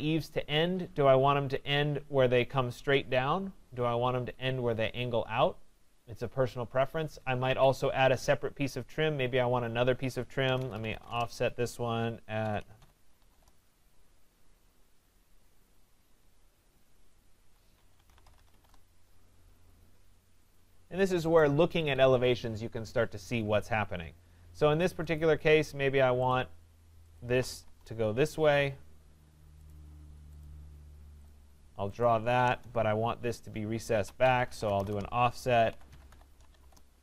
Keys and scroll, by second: 7.3 Escape, 11.1 Return, 17.4 Escape, 18.6 Return, 21.8 Escape, 27.6 Return.